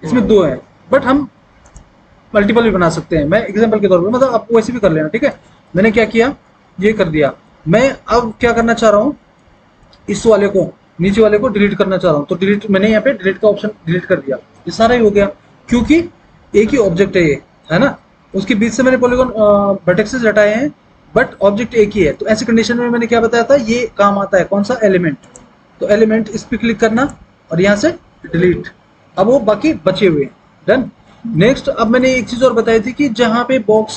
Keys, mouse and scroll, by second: 5.6 alt+w, 6.1 alt+w, 14.2 Delete, 16.1 ctrl+z, 28.8 Delete.